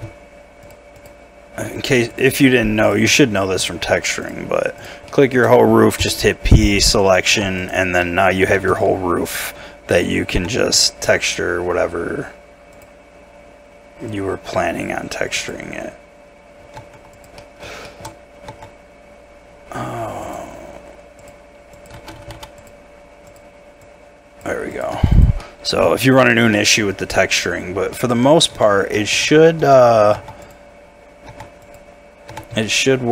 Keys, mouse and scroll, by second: 0.6 shift+click, 1.7 shift+click, 3.1 shift+middle click, 4.2 shift+click, 5.1 shift+middle click, 6.0 p, 7.3 Tab, 8.0 middle click, 8.7 z, 9.3 right click, 9.9 middle click, 10.3 Tab, 10.6 a, 16.8 Tab, 17.4 middle click, 18.5 Tab, 21.9 d, 22.1 s, 22.3 d, 24.9 Tab, 25.4 middle click, 26.0 shift+middle click, 26.3 shift+scroll up 1, 26.5 middle click, 28.1 Tab, 28.5 a, 28.9 middle click, 29.2 Tab, 31.3 Tab, 32.3 Tab.